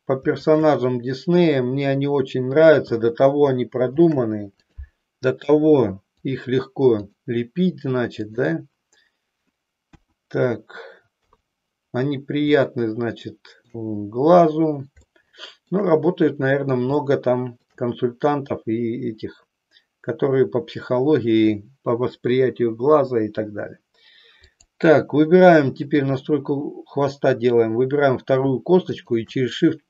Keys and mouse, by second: 0.5-1.5 shift+drag, 4.8 ctrl+shift+c, 6.1 click, 7.1 click, 9.9 KP_1, 12.5-13.7 shift+middle drag, 15.2 shift+middle click, 16.9 shift+middle click, 24.4-25.8 drag, 28.9-29.8 shift+drag.